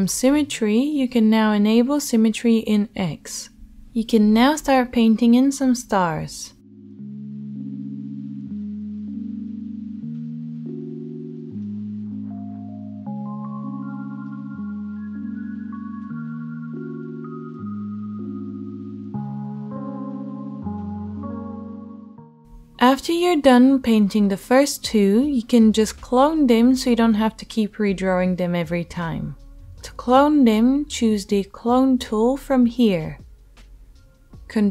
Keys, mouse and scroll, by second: 6.8 ctrl+z, 10.2 ctrl+z, 14.6 ctrl+z, 16.2-17.5 drag, 17.1 alt+middle click, 17.3 alt+middle click, 17.5-19.0 middle drag, 19.0-21.7 drag, 21.7 alt+middle click, 21.7 alt+click, 21.9 alt+middle click, 22.4 alt+click, 22.4 alt+right click, 22.6 alt+click, 22.6 alt+right click, 23.1 click, 24.6 click, 25.2 ctrl+z, 27.1 click, 29.0 ctrl+z, 29.0-34.7 middle drag.